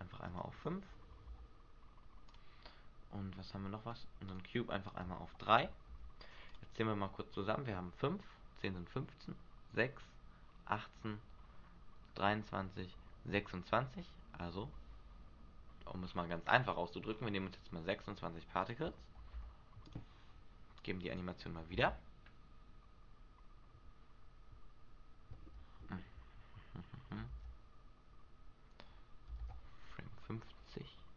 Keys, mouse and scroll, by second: 0.4 click, 2.8-3.7 scroll down 2, 4.4 click, 4.4-5.0 scroll down 1, 5.0 click, 7.2-8.7 scroll up 1, 11.8-13.3 scroll down 1, 14.7-15.7 scroll up 1, 16.2-17.3 scroll up 6, 17.3-18.8 scroll up 3, 18.8 click, 18.8 scroll up 1, 21.0 click, 21.9 alt+a, 26.1 Escape, 27.4 alt+a, 29.6 alt+a.